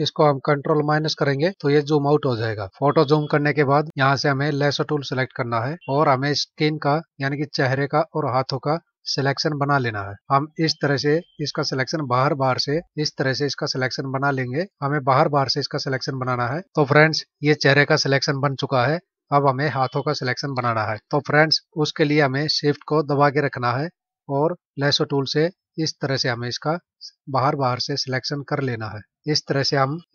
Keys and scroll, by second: 1.0 ctrl+-, 2.7 space.